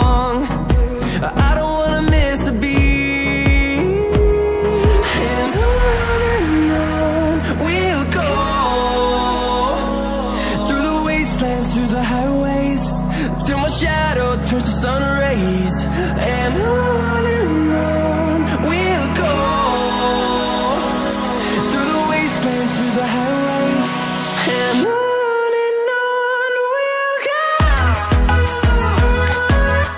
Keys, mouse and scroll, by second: 2.7 ctrl+c, 2.9 ctrl+v, 4.0 click, 8.1 right click, 8.8 click, 11.5 scroll up 1, 11.9 click, 13.7 scroll up 1, 14.2 click, 15.4 scroll down 1, 16.9 click, 20.1 double click, 20.6 scroll up 1, 21.4 click, 23.1-23.5 scroll down 1, 25.4 click, 25.9 scroll down 1, 26.3 click, 27.8-28.6 typing, 29.3 click.